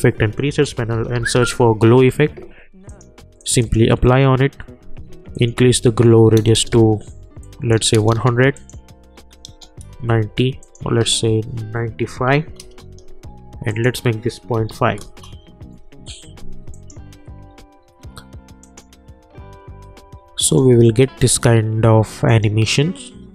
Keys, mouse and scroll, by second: 0.4-1.8 typing, 2.8 click, 9.8 Return, 10.6 click, 12.6 Return, 13.7 click, 15.0 Return, 16.7 click.